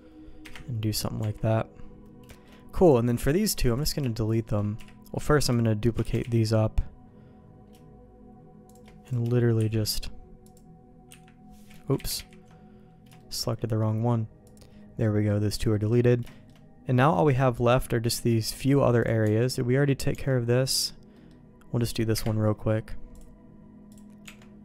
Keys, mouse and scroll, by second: 0.5 KP_Divide, 1.2 Tab, 2.3 shift+middle click, 3.8 click, 4.3 shift+click, 4.8 KP_3, 5.3 shift+middle click, 6.0 shift+d, 9.1 click, 9.6 Delete, 10.4 click, 11.1 Delete, 13.3 ctrl+z, 15.0 middle click, 15.7 middle click, 16.3 shift+middle click, 17.0 middle click, 17.7 middle click, 19.0 click, 19.2 Tab, 20.1 Tab, 21.1 middle click, 22.1 KP_Divide, 23.1 click, 24.2 Tab.